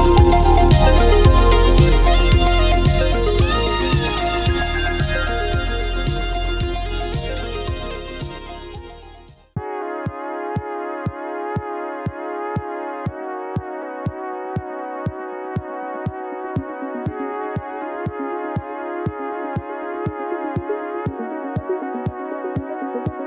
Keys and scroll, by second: 3.8 space, 5.1 space, 9.9 ctrl+z, 10.9 ctrl+z, 11.7 ctrl+z, 17.8 ctrl+z.